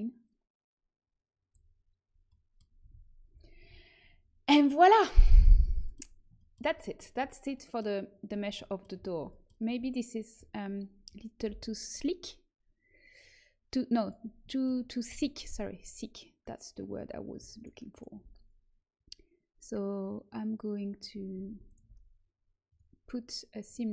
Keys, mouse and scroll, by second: 0.2-2.2 drag, 2.2 middle click, 2.7 z, 3.2 a, 3.5 Tab, 9.7 Tab, 11.4 l, 13.9 click, 14.4 middle click, 14.6 click, 17.5-18.8 right drag, 21.6 a.